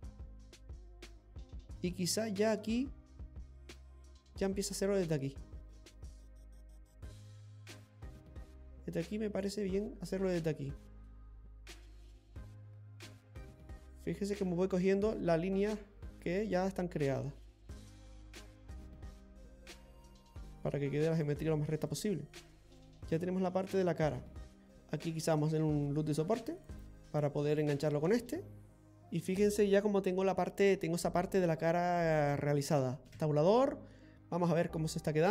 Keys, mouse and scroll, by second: 4.7 click, 10.4 middle click, 11.4 click, 14.2 middle click, 16.2 click, 19.5 click, 22.0 click, 22.2 middle click, 22.2 scroll down 3, 24.6 middle click, 24.6 scroll up 2, 26.2 ctrl+r, 28.7 middle click, 28.9-30.9 scroll up 1, 30.9-31.4 scroll down 3, 31.5 middle click, 33.2 Tab, 34.4 scroll down 1, 34.6-35.2 scroll up 4, 35.2 middle click.